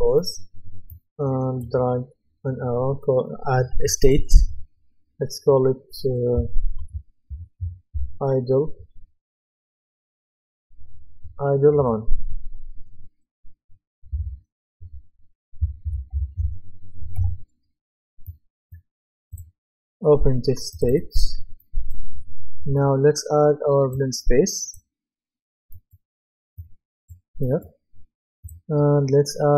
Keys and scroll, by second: 7.7-8.4 typing, 14.1 KP_Divide, 15.6-16.9 typing, 17.2 Return.